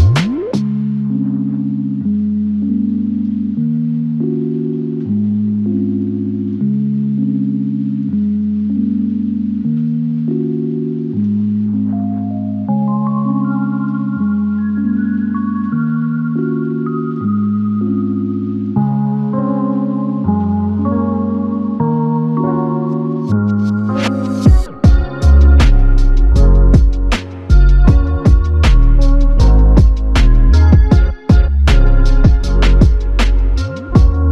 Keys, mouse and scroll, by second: 2.4 alt+click, 9.5 ctrl+alt+click, 10.4 alt+shift+click, 16.5 alt+click, 20.1 alt+click, 22.2 ctrl+alt+click, 23.9 f, 29.1 double click.